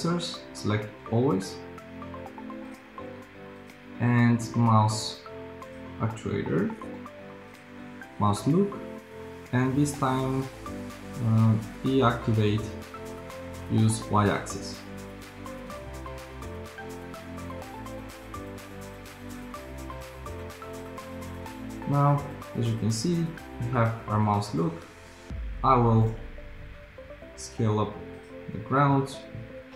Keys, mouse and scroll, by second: 21.0 p, 26.9 s.